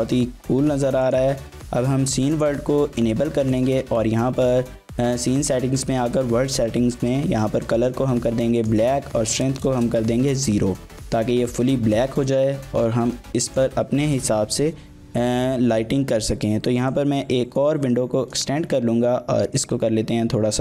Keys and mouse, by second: 1.0-2.5 drag, 3.5 click, 6.2 click, 8.6-10.3 drag, 12.3 click, 13.4 click, 15.2 t, 17.0-18.4 drag.